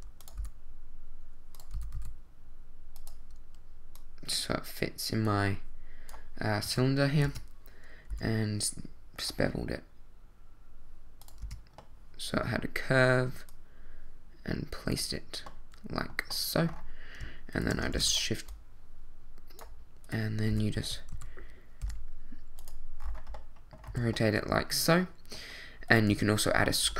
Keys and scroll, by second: 0.4 g, 1.7 s, 1.9 z, 6.6 z, 7.2 Tab, 8.1 w, 11.4 Tab, 17.9 shift+d, 20.5 r, 20.8 z, 21.1 x, 21.8 y, 23.9 a, 26.1 Tab.